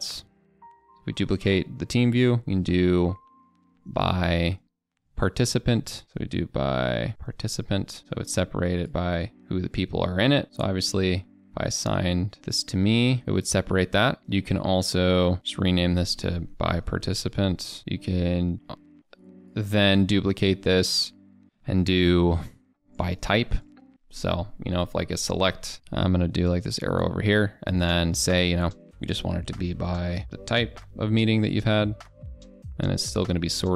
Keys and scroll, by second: 25.7 ctrl+a.